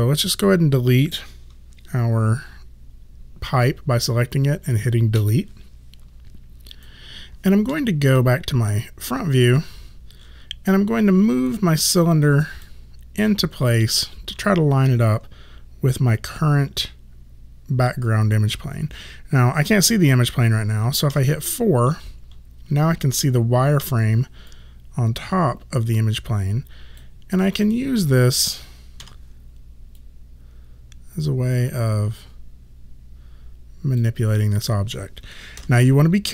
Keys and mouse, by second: 6.7 click, 8.2 space, 11.5 click, 21.1 4, 23.8 r, 24.5 click, 29.0 w, 30.0 click, 35.6 r.